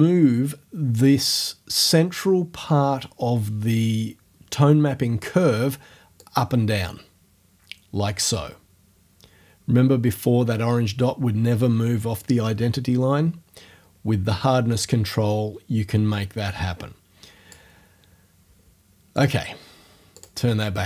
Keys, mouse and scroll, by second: 6.2-17.7 drag, 17.7 middle click, 19.2 click, 20.2 click.